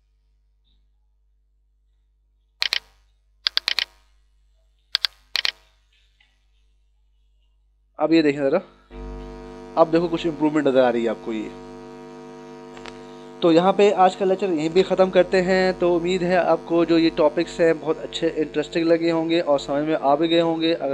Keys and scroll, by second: 3.3 [, 4.7 [, 6.6 ctrl+-, 8.2 ctrl+=.